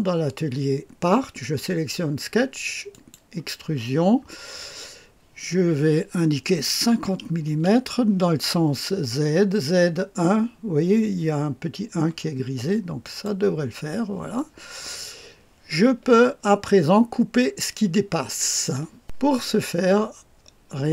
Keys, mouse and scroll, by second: 2.9 click, 3.7 click, 6.8 KP_5, 7.4 KP_0, 13.0 click, 14.3-18.7 drag.